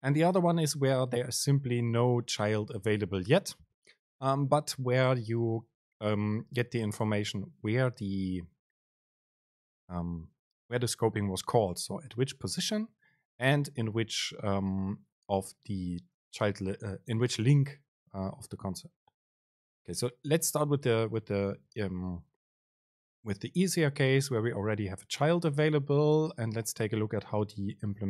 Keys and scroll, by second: 21.9 shift+Left.